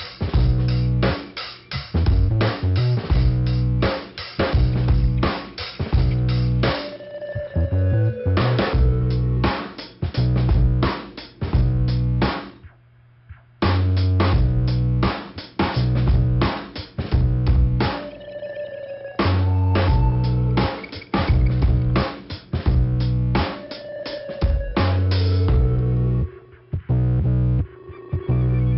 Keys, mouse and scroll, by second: 0.7 click, 1.9 click, 4.0 click, 4.9-5.7 scroll down 2, 5.7 click, 6.3 click, 6.3 double click, 7.3 double click, 8.4 click, 9.3 click, 9.8-10.9 scroll up 2, 11.9 click, 13.7 middle click, 15.5 click, 16.0 click, 19.1 click, 19.3 click, 20.5 click, 22.6 click, 24.0 click, 25.5 click, 26.2 middle click.